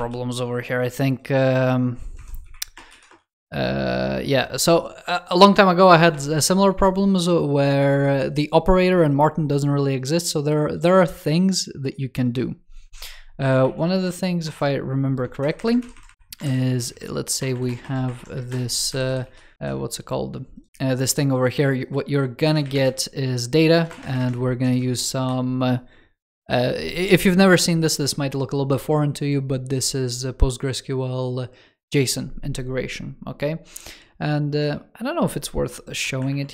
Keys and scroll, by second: 13.4 super+z, 13.9 super+z, 15.7 alt+shift+Right, 16.3 alt+shift+Left, 16.5 super+x, 17.2 alt+BackSpace, 17.9 alt+BackSpace, 18.9 super+Left, 19.1 super+v, 19.4 super+z, 34.4 super+2.